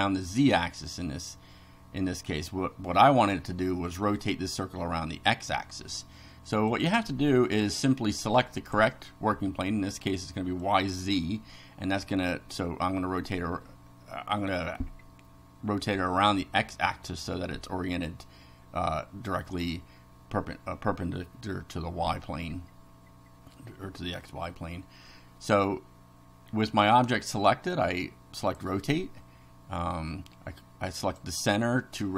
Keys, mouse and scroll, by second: 6.7 click, 8.6 click, 10.7 click, 28.4 click, 31.0 click.